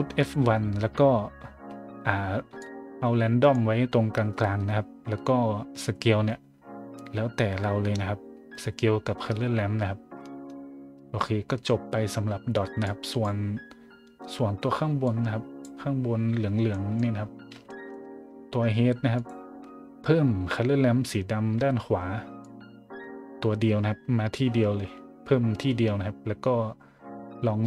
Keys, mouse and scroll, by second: 2.6-3.5 drag, 12.8 click, 15.0 click, 16.7 middle drag, 17.1 middle click, 17.6 shift+middle drag, 19.1 click, 22.4-27.6 drag.